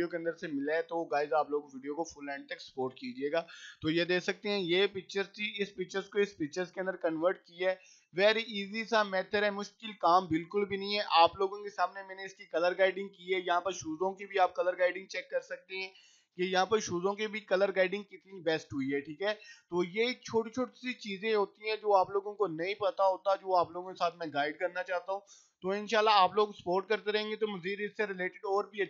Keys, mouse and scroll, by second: 0.3 scroll up 1, 0.7 click, 0.9 scroll up 1, 3.1-4.8 drag, 5.2 scroll down 1, 5.8 click, 6.9 scroll down 1, 7.7-8.7 scroll down 1, 9.0 click, 9.3 scroll down 1, 13.4-14.0 scroll down 1, 14.0-15.6 drag, 15.6-16.1 scroll down 1, 16.3 click, 16.6 scroll up 1, 17.3-19.7 drag, 19.7 click, 20.7 click, 21.5 click, 22.6 click, 24.0 click, 25.1 click, 26.3-28.6 drag, 28.6 click.